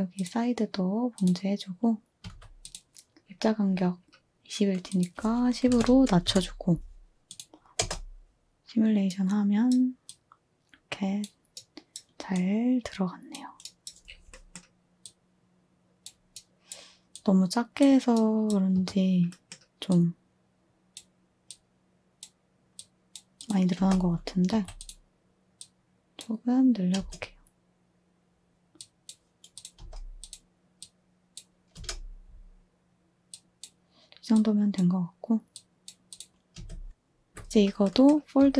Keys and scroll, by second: 2.2 a, 5.3-6.2 typing, 6.2 Return, 7.4-7.7 typing, 11.3 typing, 18.7 2, 23.7-24.4 typing, 26.9 space, 29.7 space, 36.5 space, 37.2 space, 38.3 z.